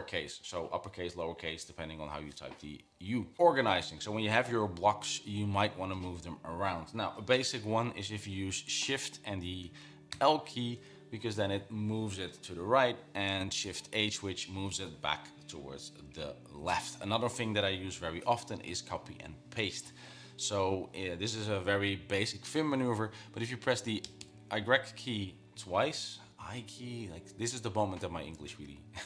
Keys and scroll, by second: 10.5 shift+l, 14.0 shift+h, 24.5 typing.